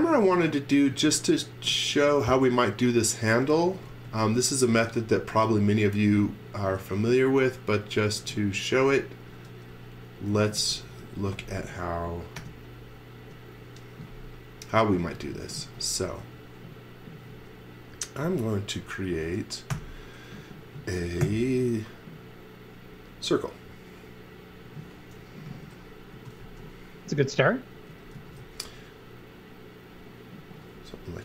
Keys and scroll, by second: 0.0 x, 3.6 x, 3.9 v, 8.2-12.4 typing, 15.0 x, 15.6 z, 16.2 x, 19.7 i, 21.2 Right, 25.5 z, 26.1 x, 26.4 v, 27.7-28.9 typing.